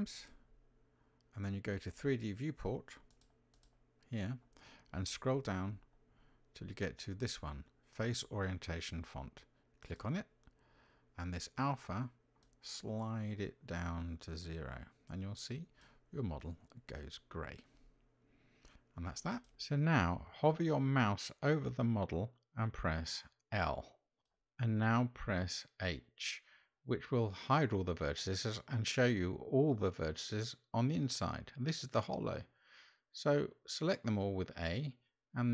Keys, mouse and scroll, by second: 23.0 l, 26.2 h, 32.4 a, 34.3 x.